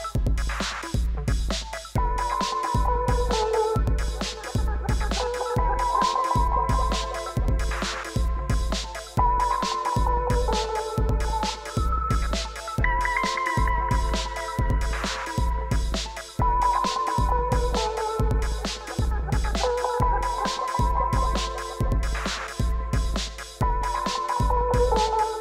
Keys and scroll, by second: 2.1 1, 2.2 d, 2.7 5, 3.0 Return, 5.7 ctrl+l, 6.3 alt+a, 9.8 shift+a, 10.2 m, 10.3 b, 11.6 5, 11.7 Return, 12.9 shift+a, 13.2 n, 13.3 o, 13.3 i, 15.7 5, 15.8 Tab, 16.3 1, 16.5 Tab, 16.7 Return, 22.8-25.3 typing, 22.9 Tab.